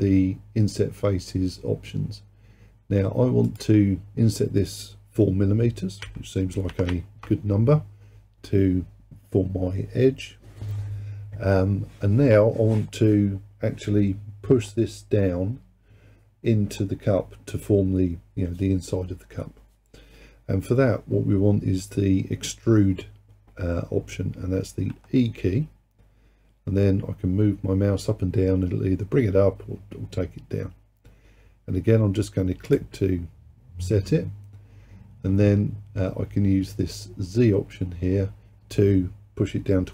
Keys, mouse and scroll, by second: 3.5-6.7 drag, 6.9 m, 24.9 e.